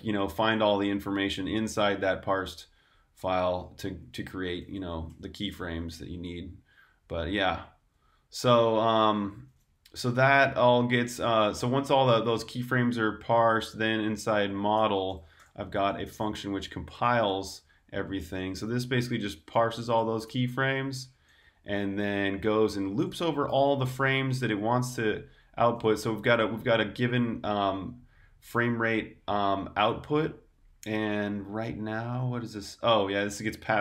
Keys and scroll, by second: 0.0-3.0 typing, 6.2 typing, 7.7 shift+j, 10.8 super+j, 13.1 typing, 14.4-19.8 typing, 31.5-33.8 typing.